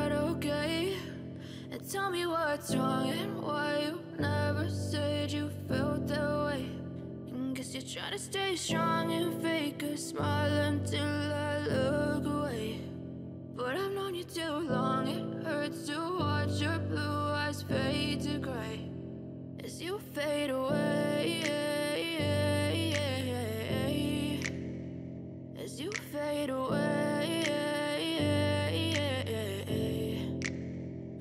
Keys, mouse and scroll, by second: 19.8 g, 21.1-22.8 typing, 25.5-31.1 typing.